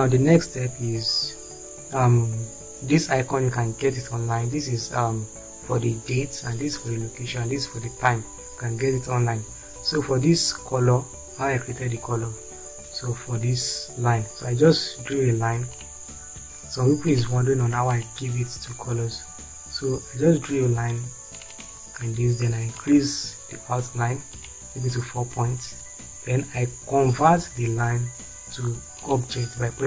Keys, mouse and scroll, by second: 0.5 shift+F4, 25.8 space.